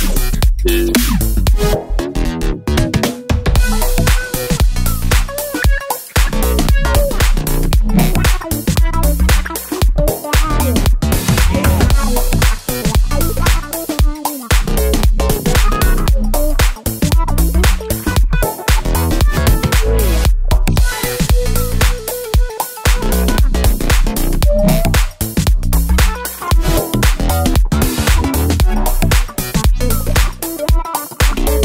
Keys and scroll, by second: 1.6 d, 5.9 Right, 6.0 Right, 6.1 Right, 6.2 Right.